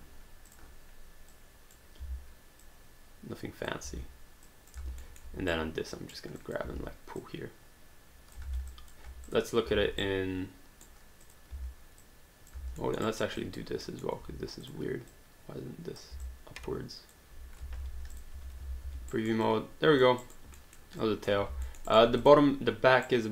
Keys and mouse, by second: 0.5 click, 3.9 e, 4.5 click, 5.1 alt+middle click, 5.5 right click, 6.4 click, 6.7 w, 7.2 click, 8.7 alt+click, 9.3 click, 10.0 right click, 11.2 click, 11.5 w, 12.0 click, 12.8 alt+middle click, 13.1 alt+right click, 13.4 alt+click, 13.9 alt+middle click, 14.6 click, 16.2 alt+click, 17.8 alt+d, 18.1 click, 18.8 alt+d, 19.2 alt+right click, 19.4 alt+click, 20.2 alt+right click, 20.6 alt+middle click, 21.0 alt+click, 21.7 alt+middle click, 22.2 click, 23.1 right click.